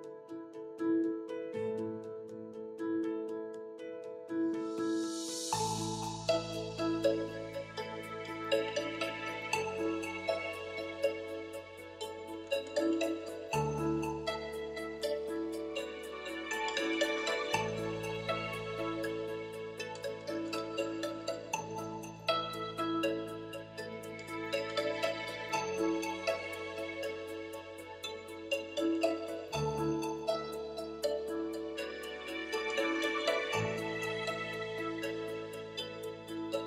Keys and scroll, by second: 12.0 ., 12.7 3.